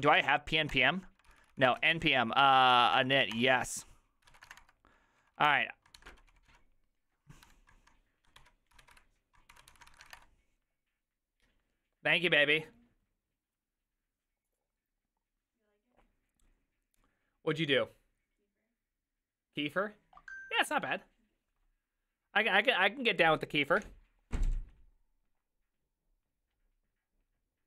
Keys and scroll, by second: 0.0-10.7 typing, 0.7 Return.